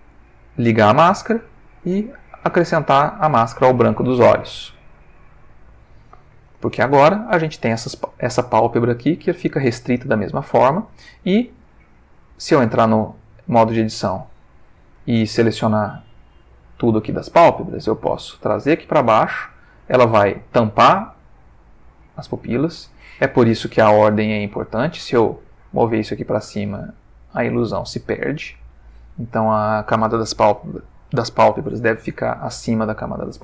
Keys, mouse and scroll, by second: 0.1 click, 1.7 click, 2.9 click, 4.1-5.5 ctrl+middle drag, 5.6-6.6 ctrl+middle drag, 11.1 Tab, 13.5 click, 15.6-16.1 drag, 16.4 l, 18.1-22.7 drag, 22.8 Tab, 24.4 click, 25.6 click, 28.4 click, 29.7 click.